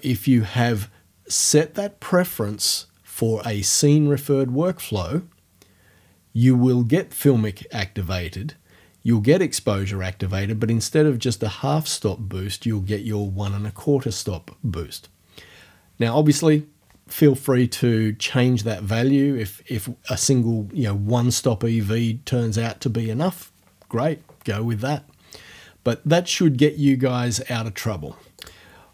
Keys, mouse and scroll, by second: 28.4 click.